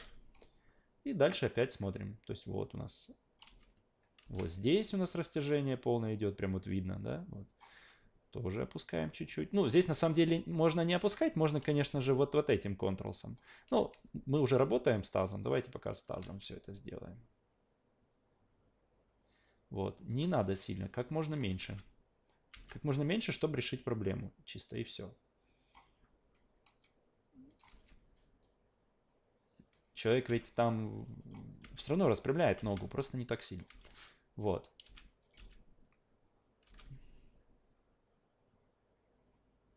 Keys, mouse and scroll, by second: 0.4-3.4 drag, 3.5 alt+v, 4.2 alt+v, 4.6-7.6 drag, 8.9 click, 9.8 ctrl+z, 10.8 alt+click, 11.0 q, 11.5 click, 11.7 e, 12.4 click, 13.5 ctrl+z, 13.8 ctrl+z, 14.6 w, 15.4 click, 16.7 click, 20.1 s, 21.2 click, 21.6 alt+v, 22.5 alt+v, 23.1 click, 26.8 click, 27.7 ctrl+z, 28.4 click, 30.3 s, 31.2 click, 31.6 alt+v, 32.6 alt+v, 33.2-33.6 drag, 33.7 alt+v, 34.8 alt+v, 35.2 click, 35.4 alt+v, 36.6 alt+v, 36.9-39.7 drag.